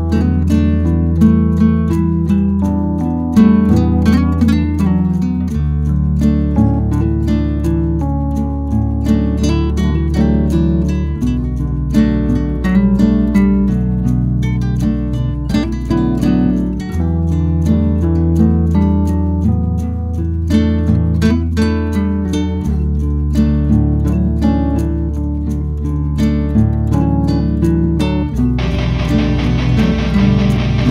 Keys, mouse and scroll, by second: 5.5 scroll down 1, 5.9 click, 9.5 scroll down 1, 10.5-12.5 drag, 12.5 scroll up 1, 13.4 scroll down 1, 13.6 click, 14.7 Delete, 15.1-17.3 drag, 17.3 scroll up 1, 20.1-24.1 drag, 24.1 ctrl+q, 27.5 ctrl+q, 28.3 right click.